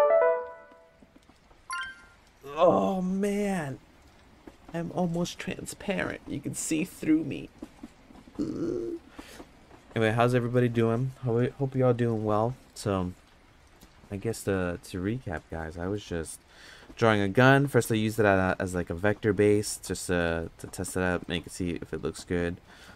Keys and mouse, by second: 15.5 middle click, 17.7 middle click, 20.1 middle click, 21.2 middle click.